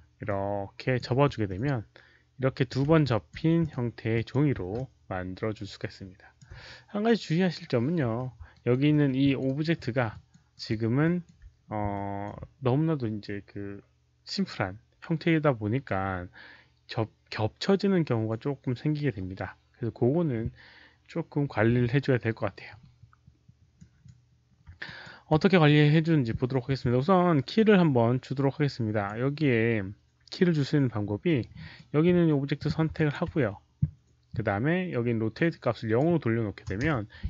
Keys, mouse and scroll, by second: 0.0-3.4 typing, 0.2 ctrl+click, 1.4-2.7 middle drag, 2.3 click, 3.0 ctrl+alt+click, 3.5 ctrl+click, 4.0 ctrl+click, 4.7-6.3 ctrl+alt+drag, 6.1-6.8 typing, 6.3 middle click, 8.4 alt+right click, 8.8 alt+middle click, 9.1-9.8 typing, 9.1 alt+click, 9.4 alt+right click, 9.7 alt+middle click, 10.0 alt+click, 10.4 alt+right click, 10.9 alt+click, 11.8 alt+click, 14.3 alt+click, 15.4 alt+click, 15.4 alt+right click, 15.4 alt+middle click, 19.2 alt+click, 19.2 alt+right click, 19.2 alt+middle click, 20.3 alt+right click, 20.3 alt+click, 20.3 alt+middle click, 23.7 click, 24.8 ctrl+click, 27.4-29.0 ctrl+drag, 31.2 click, 32.9 ctrl+click, 35.3 ctrl+click, 36.6 KP_0, 36.7 Return.